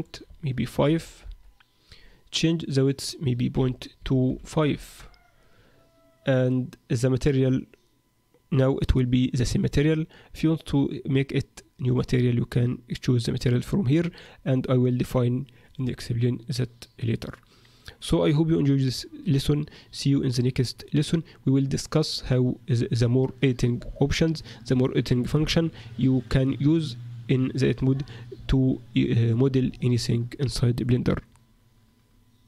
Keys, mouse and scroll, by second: 2.5 click.